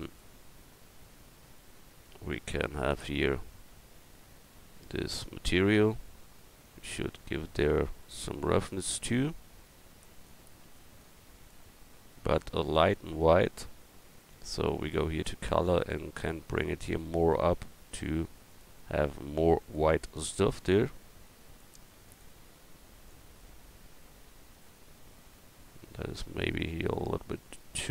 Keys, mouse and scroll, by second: 6.6-12.9 drag, 14.3-16.2 drag, 18.6-21.5 drag, 22.2-27.9 drag.